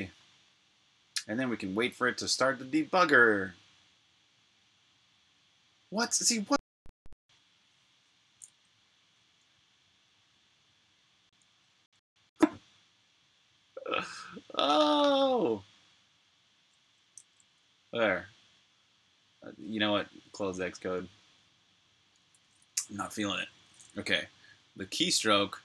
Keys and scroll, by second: 1.9 super+o, 2.1 typing, 4.2 Return, 17.1 super+z, 20.0 super+q.